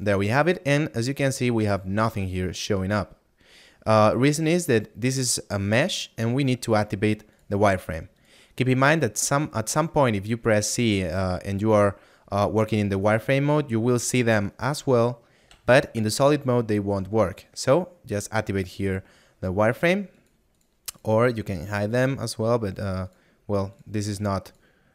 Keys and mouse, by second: 24.1 click.